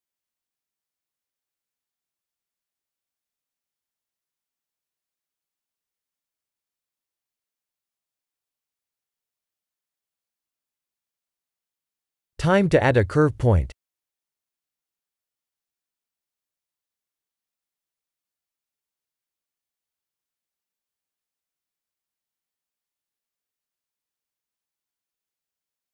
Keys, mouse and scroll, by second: 1.9 click, 3.7-5.0 scroll down 16, 5.4 middle click, 6.1 middle click, 7.1 click, 7.8 5, 8.6-9.9 scroll down 8, 9.9-10.7 scroll up 8, 10.9 shift+middle click, 11.6 KP_1, 12.7 scroll up 3, 13.2 click, 14.9 shift+a, 25.0 shift+middle click.